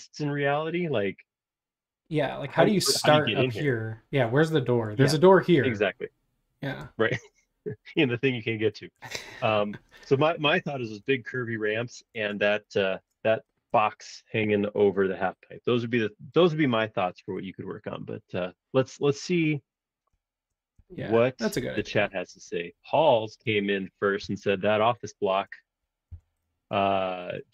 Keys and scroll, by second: 7.0 super+Tab, 12.2 super+Tab, 12.9 super+Tab, 18.3 r, 23.4 space, 24.2 b, 25.4 space, 26.1 p, 27.3 space.